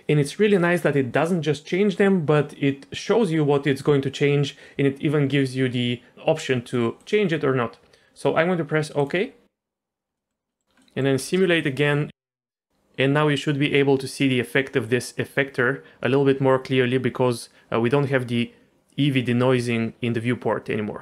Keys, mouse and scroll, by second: 9.8 middle click, 10.2 middle click, 10.5 middle click, 10.8 middle click, 11.2 space, 11.6 click, 11.9 g.